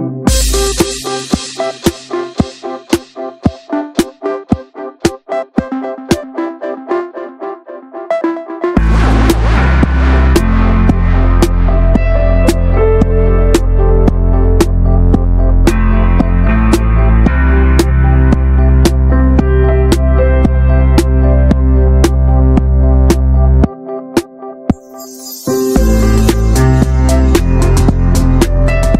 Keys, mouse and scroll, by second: 3.2-3.8 alt+shift+drag, 3.8 ctrl+b, 5.2 Tab, 5.2 scroll down 1, 5.4 middle click, 5.6 scroll up 2, 5.7 Tab, 5.9 middle click, 6.1 3, 6.2 click, 6.4-7.4 shift+middle drag, 7.4-8.0 drag, 8.0 s, 9.3 middle click, 9.7 s, 10.4 middle click, 10.7 click, 11.2 ctrl+z, 11.3 click, 12.1 middle click, 12.2 scroll down 2, 12.4 middle click, 12.9 click, 13.3 scroll up 1, 13.4 shift+middle click, 13.6 s, 14.6-15.2 middle drag, 15.2 click, 15.8 ctrl+z, 15.9-16.3 drag, 16.3 middle drag, 16.6 s, 17.0 middle click, 17.1-17.6 scroll up 2, 17.9 ctrl+b, 19.8 click, 19.9 ctrl+a, 20.4 shift+middle click, 21.3 ctrl+r, 23.2-23.5 middle drag, 23.5 ctrl+b, 25.6 click, 26.0 s.